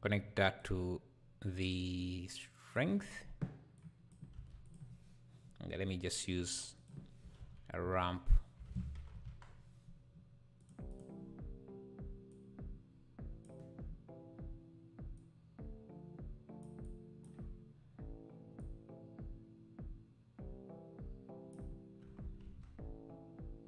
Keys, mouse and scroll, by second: 2.8 click, 3.8 click, 4.3 shift+a, 12.3-21.7 drag, 22.5 ctrl+s.